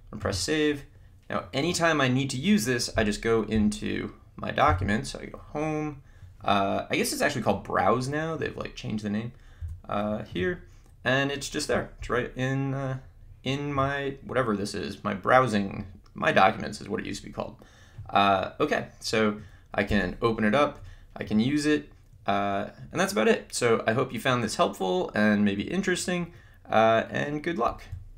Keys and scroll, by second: 4.6 Home, 9.6 2, 20.0 Return.